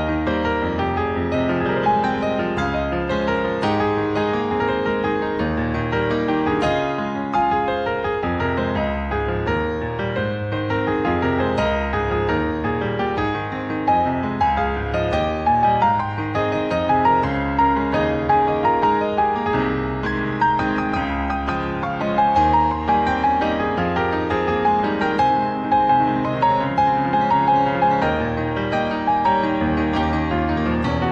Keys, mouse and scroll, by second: 1.5 s, 3.0 g, 6.1 click, 6.8-8.0 ctrl+scroll up 10, 9.5 click, 10.9 r, 15.4 g, 18.3 click, 20.6 shift+middle click, 22.5 r, 26.2 s, 27.4 r, 29.8 g.